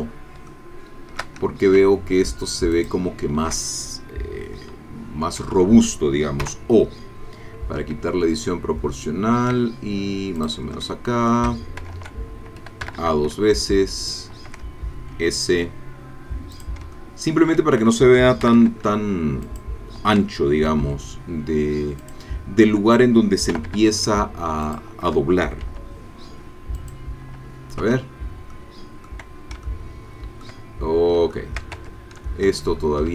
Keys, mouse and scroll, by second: 0.5 shift+click, 2.7 alt+shift+click, 4.5 s, 5.4 Escape, 6.4 o, 7.8 s, 10.4 shift+click, 10.9 shift+middle click, 11.8 shift+Caps_Lock, 12.8 a, 14.0 alt+shift+click, 15.1 s, 16.5 click, 16.8 middle click, 17.0 shift+middle click, 18.5 a, 19.4 alt+shift+click, 20.7 s, 22.0 click, 23.5 a, 24.6 alt+shift+click, 25.6 s, 26.8 click, 27.9 Tab, 28.5 middle click, 29.7 shift+middle click, 30.8 shift+scroll up 1, 31.3 shift+middle click, 31.8 shift+click, 31.8 shift+Tab, 32.6 shift+middle click.